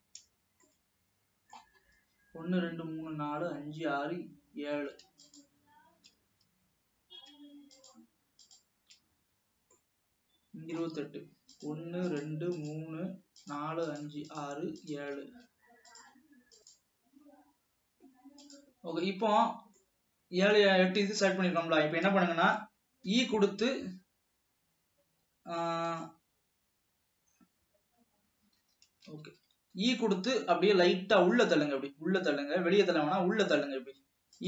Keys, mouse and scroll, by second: 1.1-2.2 middle drag, 2.2-4.5 scroll up 2, 5.6 shift+click, 8.0 shift+click, 8.5 shift+click, 10.0-11.7 middle drag, 11.7 shift+click, 12.2 shift+click, 13.5 shift+click, 14.0 shift+click, 14.4 shift+click, 14.9-15.4 shift+drag, 16.7 middle click, 19.2 scroll up 2, 19.5-20.0 scroll down 4, 20.0-21.7 middle drag, 21.7-23.3 scroll up 3, 23.3 e, 27.0 s, 29.3 ctrl+z, 30.0 e.